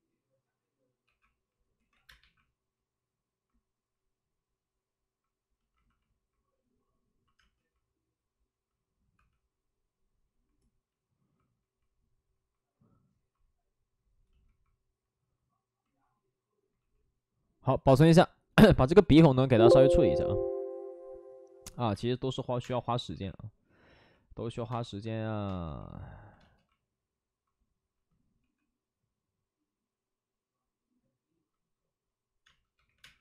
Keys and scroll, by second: 0.9 ctrl+z, 1.0-2.6 typing, 1.7 ctrl+z, 7.3 space, 9.1 2, 14.8 ctrl+d, 15.7 ctrl+d, 15.8 ctrl+z, 18.9 ctrl+d, 22.4 space, 22.5 2, 23.1 space, 23.1 2, 24.4 ctrl+z, 24.6 space, 28.3 space, 28.3 5, 32.4 space, 32.7 3, 32.9 3, 32.9 space.